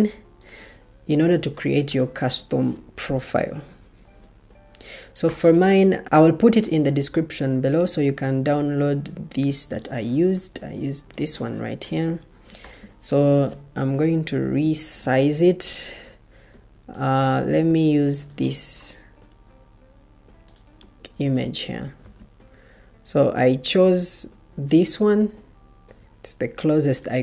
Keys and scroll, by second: 14.2 ctrl+k, 15.5 Escape, 16.4 Escape, 17.6 ctrl+d, 20.7 Escape, 21.9 ctrl+d.